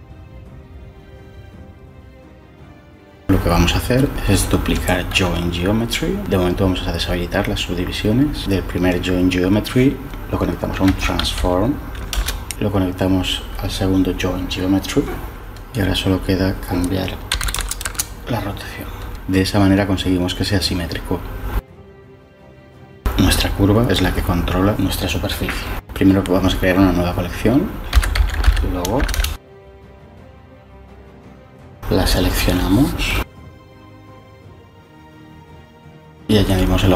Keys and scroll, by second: 5.5 shift+d, 7.2 m, 10.4-11.8 typing, 12.1 Return, 17.0-18.0 typing, 27.6-28.9 typing, 28.9 Return, 29.1 Return.